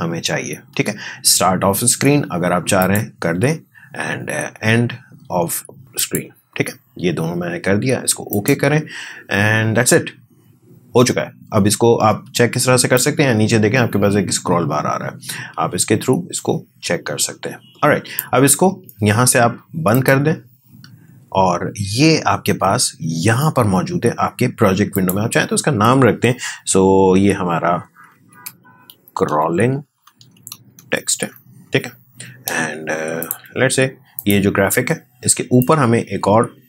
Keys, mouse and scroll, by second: 12.9-19.9 drag, 34.3-36.6 drag.